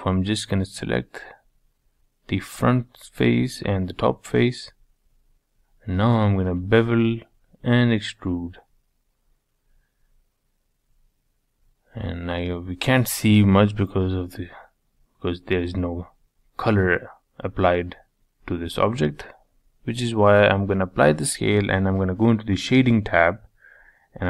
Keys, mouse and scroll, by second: 0.2 shift+click, 0.6 shift+click, 1.1 shift+click, 1.4 shift+click, 1.8 shift+click, 2.5-2.9 scroll down 2, 2.9-4.7 middle drag, 4.7 ctrl+b, 6.7 e, 9.3 middle click, 10.1 Tab, 10.4 scroll down 3, 10.5 middle click, 11.1-11.5 scroll up 4, 11.5-13.2 middle drag, 13.2 scroll up 4, 13.5-15.8 shift+middle drag, 16.2-16.5 scroll down 3, 16.5-19.3 shift+middle drag, 19.3 ctrl+a, 19.9-22.5 middle drag, 22.5 click, 23.0-23.6 middle drag, 23.6-23.9 scroll up 3, 23.9-24.2 shift+middle drag.